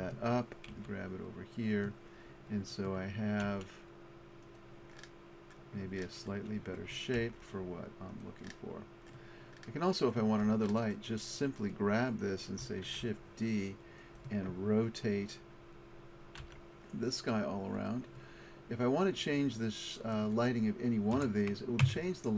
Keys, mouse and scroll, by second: 0.8 g, 2.9 click, 3.5 r, 7.3 g, 11.7 middle click, 12.6 middle click, 12.9 shift+d, 16.4 r, 19.9-21.7 middle drag.